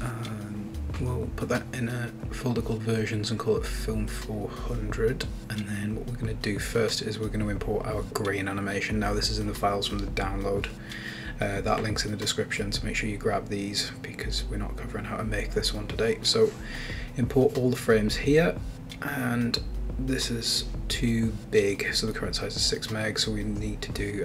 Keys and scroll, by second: 0.4-4.5 typing, 4.8 Return, 15.5 super+Up, 21.0 Return.